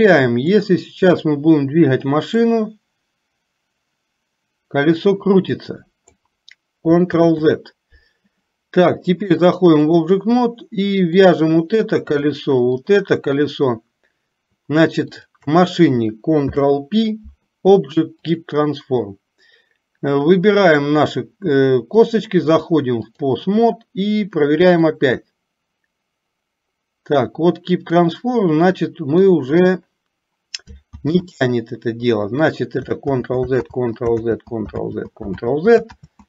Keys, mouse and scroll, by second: 0.7 click, 2.7-6.3 drag, 7.3 ctrl+z, 9.3 click, 13.0 shift+click, 15.2 shift+click, 21.0 click, 22.1-23.3 drag, 25.2-29.5 drag, 33.2 ctrl+z, 33.8 ctrl+z, 34.3 ctrl+z, 35.0 ctrl+z, 35.6 ctrl+z, 36.0 ctrl+z.